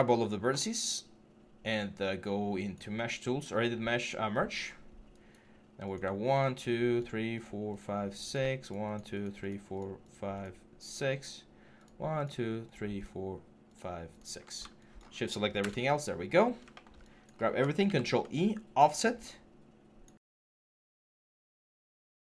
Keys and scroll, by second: 15.4 BackSpace, 17.6 ctrl+e.